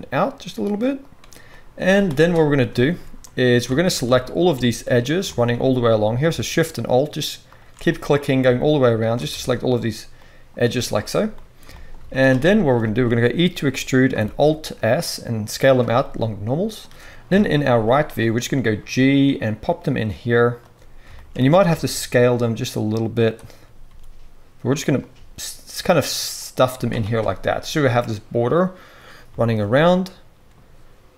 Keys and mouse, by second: 1.8 z, 3.6 alt+a, 6.7 alt+shift+click, 7.5-31.1 alt+shift+middle drag, 10.6 z, 11.9 z, 13.6 e, 14.2 alt+s, 17.2 KP_3, 17.7 z, 18.6 g, 21.3 s, 23.9 s, 25.1 g, 26.7 z.